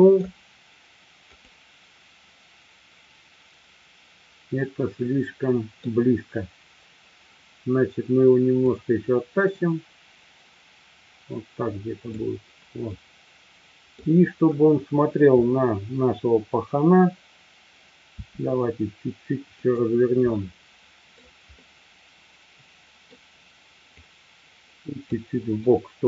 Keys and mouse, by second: 3.1-5.1 drag, 5.1-5.9 middle drag, 8.6-12.2 drag, 13.0-14.1 middle drag, 18.2 r, 19.6 click, 20.4-21.2 middle drag, 21.6-23.2 middle drag, 24.0-25.1 drag, 25.6-26.0 middle drag.